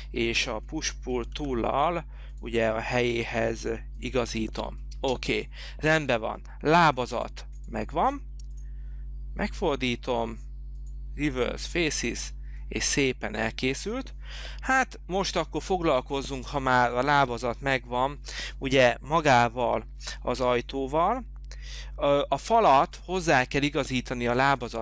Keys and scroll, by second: 1.5 p, 5.2 space.